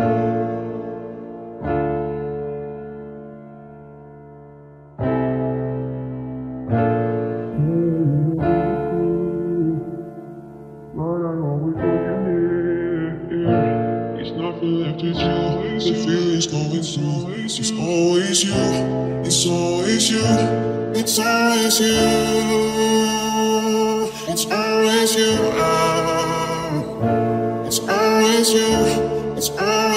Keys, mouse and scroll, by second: 0.9 right click, 1.4-4.3 middle drag, 2.7 c, 7.2 right click, 7.6 KP_Decimal, 7.8 right click, 7.8 click, 8.8 z, 10.1-11.3 middle drag, 12.0-13.1 drag, 13.1 KP_3, 13.3 Tab, 14.5 ctrl+s, 15.2 z, 16.6 Tab, 18.9 z, 19.3 z, 21.2 right click, 21.5 c.